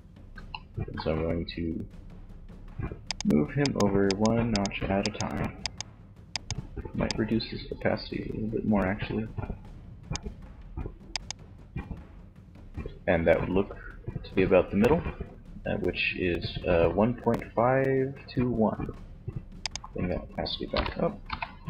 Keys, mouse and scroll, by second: 2.1 click, 3.8-5.6 drag, 7.7 click, 10.6-12.3 drag, 18.8-20.6 drag.